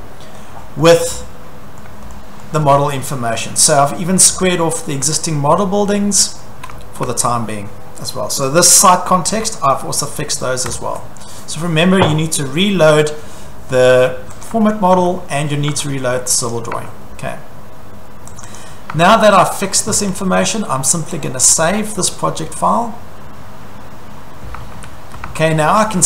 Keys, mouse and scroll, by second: 0.3 middle click, 0.4 click, 0.5 click, 0.7-1.2 scroll, 0.9 click, 1.8-3.0 shift+middle click, 2.4 middle click, 2.7 scroll, 3.9 middle click, 4.0 middle click, 5.0 shift+middle click, 5.2-6.0 scroll, 6.4 shift+middle click, 6.8 scroll, 7.0 Escape, 8.5 click, 9.3-10.4 scroll, 10.7 Escape, 14.5 click, 15.0 Escape, 15.7 Escape, 16.5 click, 16.8 Escape, 18.4 click, 18.5 click, 19.0 Escape, 21.3 click, 24.5 Escape, 24.7-25.2 scroll, 25.2 Escape.